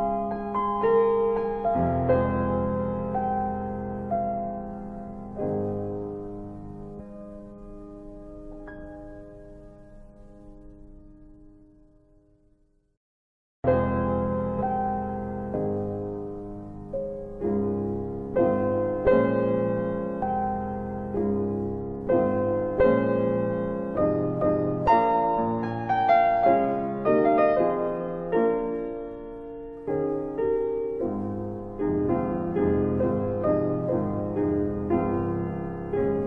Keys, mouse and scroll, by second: 2.0 click, 6.2 click, 7.6 click, 9.6 alt+click, 10.3 alt+right click, 10.4 alt+right click, 10.7 alt+click, 10.8 alt+click, 11.8 alt+click, 14.9 alt+middle click, 15.0 alt+middle click, 15.4 alt+click, 15.6 alt+click, 21.8 alt+click, 22.5 alt+right click, 22.6 alt+right click, 22.9 alt+click, 23.0 alt+click, 30.7 right click.